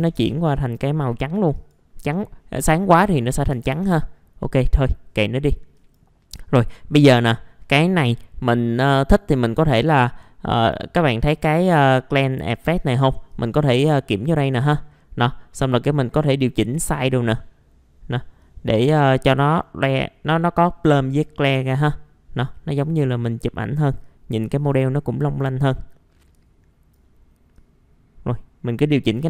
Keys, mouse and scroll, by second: 1.3 click, 3.5 KP_1, 5.7-17.5 drag, 17.5 click, 19.5-25.5 drag, 25.5-27.5 drag, 27.5-29.2 drag.